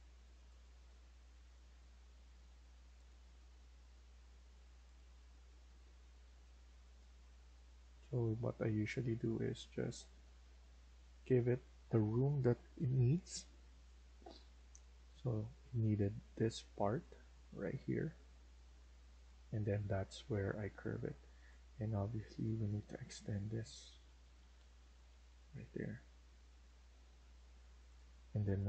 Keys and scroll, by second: 5.9 Escape, 8.6 Escape, 14.7 Escape, 14.9 Escape, 15.2 Escape, 19.7 Escape, 19.9 Escape, 23.1 Down, 23.3 Down, 23.6 Down, 23.8 Down, 24.1 Down, 24.3 Down, 24.6 Down, 25.0 Down, 25.1 Down, 26.1 Down, 26.2 Down, 26.5 Down, 26.7 Down, 27.0 Escape, 27.3 Escape, 28.0 Escape, 28.3 Escape.